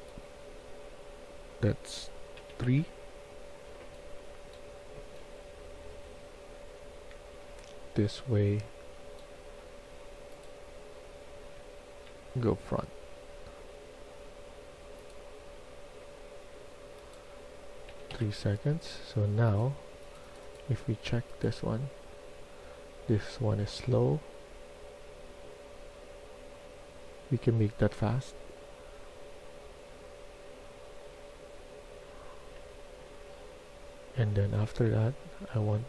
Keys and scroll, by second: 2.2 3, 2.5 Return, 3.5-5.8 typing, 7.0 a, 7.4 a, 11.4 w, 12.5 w, 17.8 3, 18.0 Return, 34.4-35.8 typing.